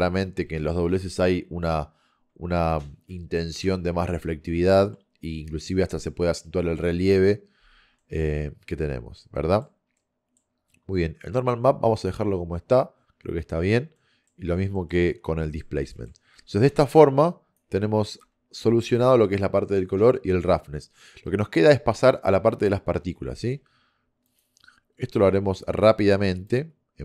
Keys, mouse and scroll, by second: 7.5 middle click, 16.4 a, 16.8 b, 18.2 g, 26.4 click.